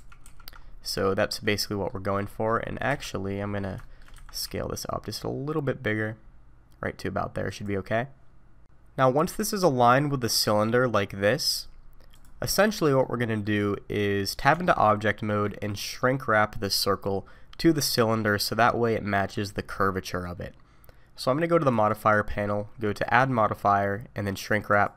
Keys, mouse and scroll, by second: 0.2 ctrl+z, 0.6-1.0 scroll up 2, 1.0 shift+middle click, 1.6 middle click, 2.9 KP_3, 3.4-3.8 scroll up 2, 3.8 shift+middle click, 4.1 a, 4.4 s, 13.0 middle click, 13.6-14.5 scroll down 4, 14.5 Tab, 15.1 middle click, 21.7 click, 23.0 click.